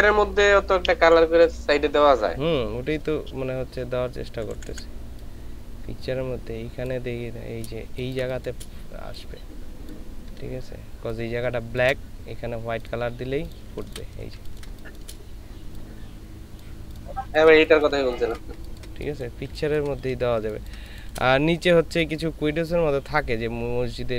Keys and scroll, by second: 3.0 Up, 4.5 Up, 4.7 Up, 8.0 ctrl+space, 13.7 ctrl+space, 14.4 ctrl+space, 17.3 ctrl+space, 20.4 ctrl+space, 22.0 ctrl+space.